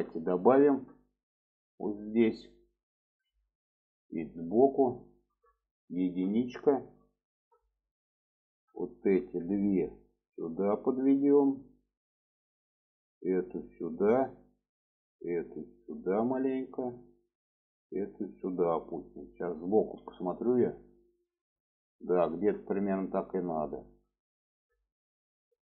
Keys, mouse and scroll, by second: 0.6 click, 1.9 click, 3.1 click, 3.6 middle click, 5.0 shift+middle drag, 6.0 alt+z, 6.6 middle click, 8.9-9.4 drag, 10.1-11.5 drag, 12.0-12.6 drag, 13.1-14.1 drag, 14.7 click, 15.4-16.7 drag, 17.1 click, 17.9 click, 19.7 alt+z, 20.4-25.6 middle drag.